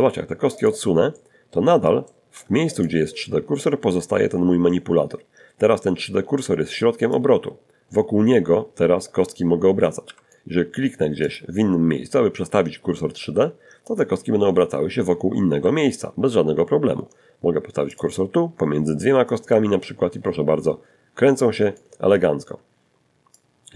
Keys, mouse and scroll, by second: 0.5 g, 1.0 click, 5.3-8.7 drag, 8.3 Escape, 9.5 click, 12.2-14.4 drag, 13.8 Escape, 16.1 click, 17.5-20.2 drag, 20.3 z, 21.6-22.8 drag, 23.0 g, 23.3 click.